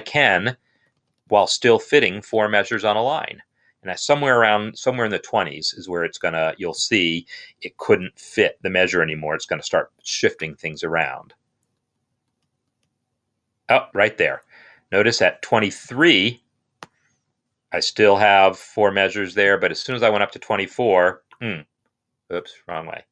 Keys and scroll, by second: 0.3 Up, 2.7 Up, 2.9 Up, 10.9 Up, 12.0 Up, 12.1 Up, 12.9 Up, 14.6 Down, 20.7 Down.